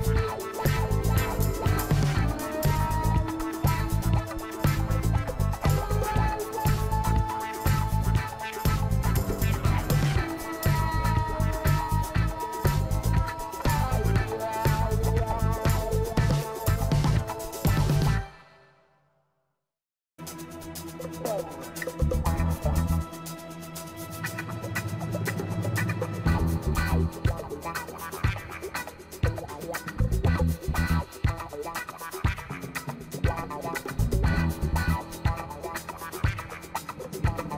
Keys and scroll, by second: 0.6 ctrl+t.